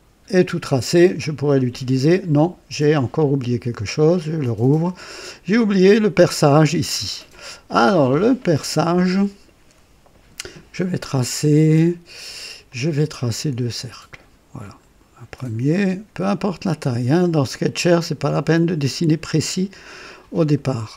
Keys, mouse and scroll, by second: 3.8 click, 5.0-5.3 scroll up 2, 12.6 click, 14.5 click, 15.3 click, 17.5 click, 18.7 click, 19.4 right click, 20.5 right click.